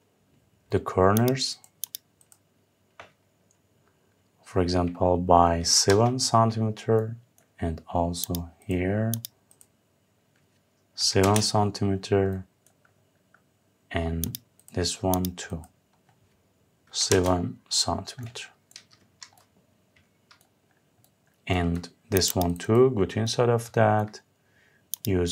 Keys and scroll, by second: 5.5 Return, 10.8 Return, 16.7 Return, 18.5 Escape.